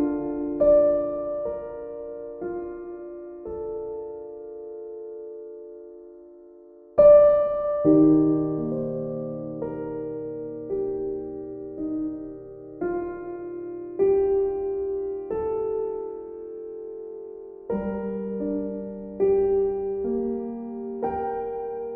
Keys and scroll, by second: 16.9 b.